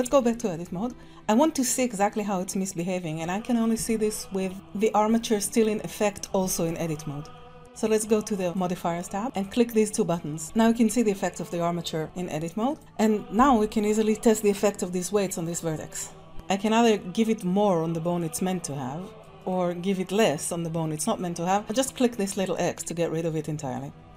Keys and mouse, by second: 0.0 Tab, 8.4 click, 9.3 click, 9.9 click, 16.3-18.2 drag, 19.2 click, 22.6 click.